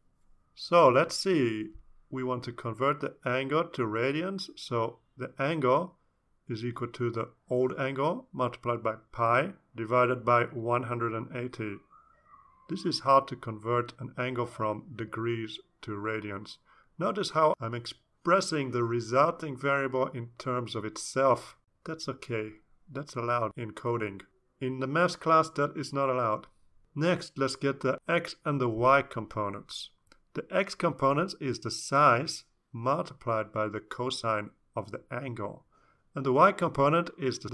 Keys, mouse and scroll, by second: 0.0-1.6 typing, 6.0-10.3 typing, 10.6 ctrl+s, 11.9 Down, 12.5 Down, 13.4 Return, 14.1 Return, 14.3 Up, 14.4 Up, 27.2 ctrl+s, 27.7-28.7 typing, 31.0-35.9 typing, 36.5 Return, 37.2-37.5 typing.